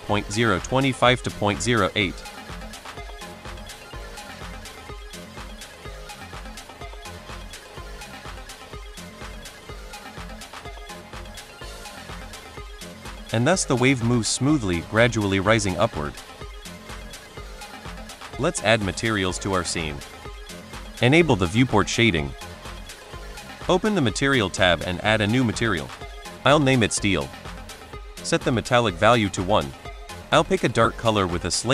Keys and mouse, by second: 2.7-5.2 drag, 6.1 middle drag, 6.6 shift+middle click, 7.1 middle click, 8.5-8.9 middle drag, 10.3 middle drag, 11.0 middle drag, 11.4 shift+middle drag, 12.4 click, 13.0 space, 14.2 space, 15.4 middle drag, 16.0 middle drag, 19.3 shift+drag, 20.0 shift+click, 22.9 click, 24.2 click, 25.0-27.2 shift+drag, 26.8 e, 28.4-28.9 drag, 29.3 click.